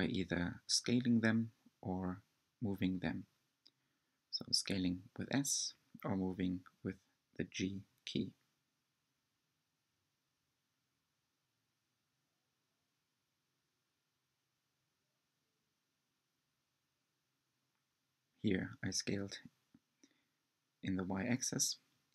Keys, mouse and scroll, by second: 4.8-7.0 middle drag, 7.0 click, 8.5 g, 14.9 click, 15.4-17.0 middle drag, 17.0 shift+click, 17.6-19.1 middle drag, 19.1-21.3 drag, 21.3-22.1 middle drag.